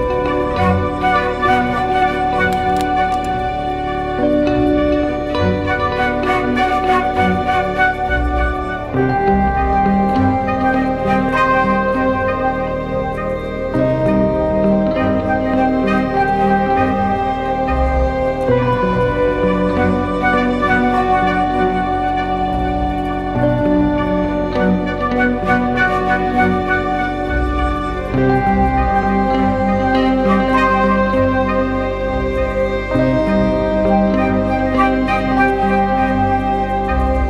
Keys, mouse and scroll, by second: 2.4 ctrl+t, 7.5 Return, 9.0 Up, 9.4 Up, 9.6 Up, 9.9 Up, 12.0 Right, 12.1 Right, 12.2 Right, 12.4 Right, 12.8 Right, 13.0 Right, 13.1 Right, 13.8 Up, 14.2 Right, 14.4 Right, 14.5 Right, 14.7 Right, 33.8-37.0 scroll up 1, 37.0-37.2 scroll down 1.